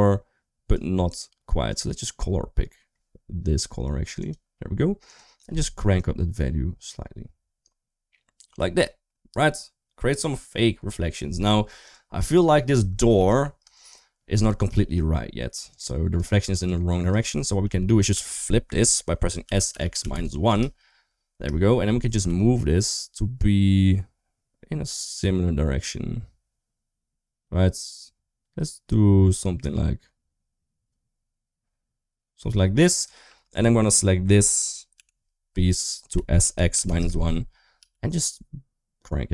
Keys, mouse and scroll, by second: 4.1 typing, 4.9 click, 8.7-9.2 middle drag, 11.7-12.2 drag, 12.6 Tab, 13.0 3, 13.6 shift+click, 15.5-16.0 drag, 16.5-16.9 shift+drag, 17.4 g, 19.3 s, 21.2 Return, 22.0 g, 33.1 3, 34.8 l, 36.0 s, 37.6 g.